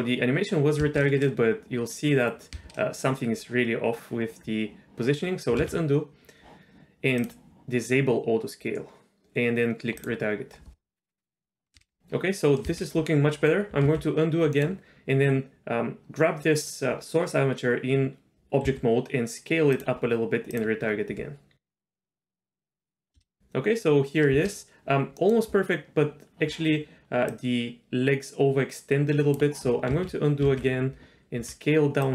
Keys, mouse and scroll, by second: 0.8 space, 2.5 space, 5.7 ctrl+z, 7.2 click, 10.0-11.4 drag, 11.7 space, 12.6 space, 14.0 ctrl+z, 14.5-15.3 middle drag, 18.7 s, 20.5-22.9 drag, 23.1 space, 24.3 space, 25.2 middle click, 27.3-29.3 drag, 30.0 ctrl+z, 30.5 ctrl+z, 31.4 s.